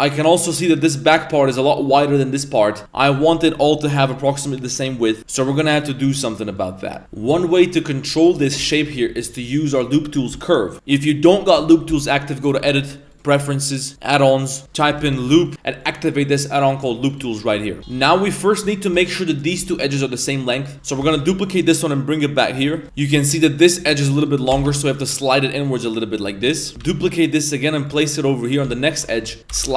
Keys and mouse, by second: 0.1-0.7 middle drag, 6.2 middle click, 7.0 ctrl+z, 7.6 a, 8.7 alt+right click, 10.7 a, 12.5-13.3 drag, 18.0 2, 18.3 right click, 19.4 right click, 21.1 shift+d, 22.8 middle click, 22.8 1.